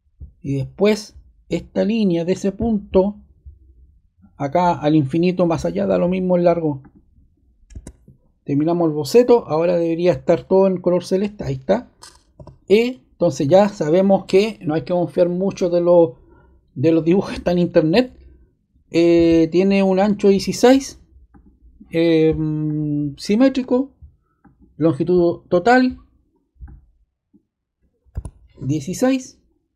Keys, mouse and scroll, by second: 2.3 click, 7.6 ↻, 8.7 click, 12.3 e, 13.4 click, 19.2 click, 21.3 click, 22.0 click, 22.6 click, 23.6 click, 24.4 click, 26.6 click, 28.1-28.5 typing.